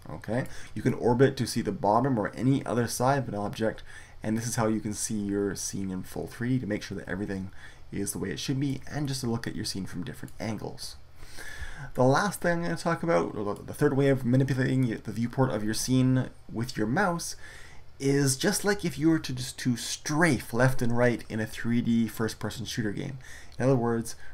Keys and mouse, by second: 2.8-4.0 middle drag, 7.0-9.0 middle drag.